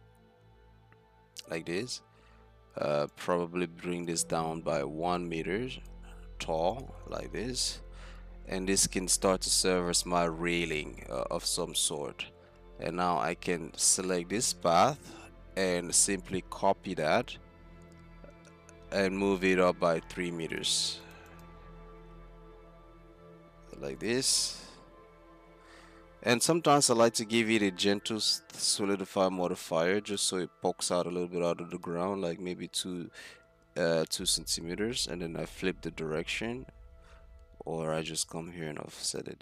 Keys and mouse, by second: 1.7 Tab, 2.0 z, 7.8 click, 8.1 z, 8.8 z, 9.4 Tab, 11.4 z, 12.6 z, 13.3 z, 14.0 click, 15.6-16.3 middle drag, 15.6 z, 16.3 z, 18.3 shift+d, 20.5-23.8 drag, 24.0-25.6 drag, 26.8-28.3 right drag, 28.3-31.8 drag, 32.9 Tab, 33.4 a, 33.6 a, 38.3-39.4 drag.